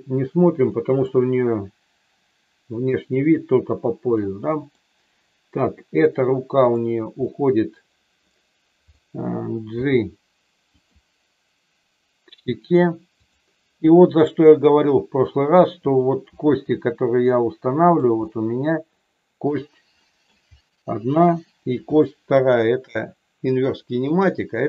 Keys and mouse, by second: 0.7 middle click, 4.3 middle click, 6.6 click, 7.3-9.0 middle drag, 9.7 g, 10.7 click, 14.3-15.5 middle drag, 16.2 r, 18.1-19.4 middle drag, 20.0 middle click, 22.4 shift+click, 24.0 click.